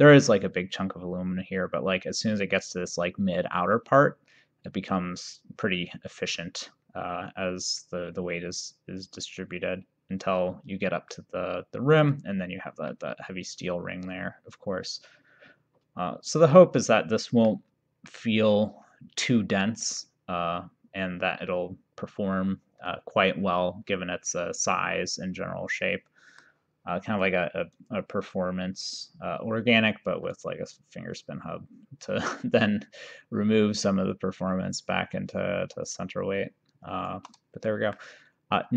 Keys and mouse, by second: 12.1 click, 13.0 middle click, 18.1 middle click, 27.2 click, 30.4 shift+right click, 37.8 middle click.